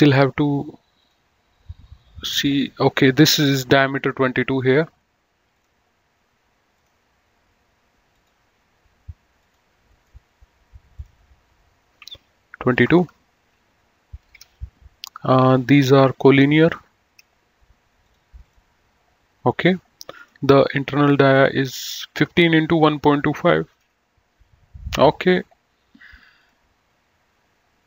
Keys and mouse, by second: 1.0 click, 5.5 click, 6.8 click, 8.1 click, 9.8 right click, 10.9 click, 12.5 KP_2, 12.9 Return, 14.2 Escape, 15.3 click, 16.5 ctrl+click, 20.2 click, 26.3 click, 27.7 click.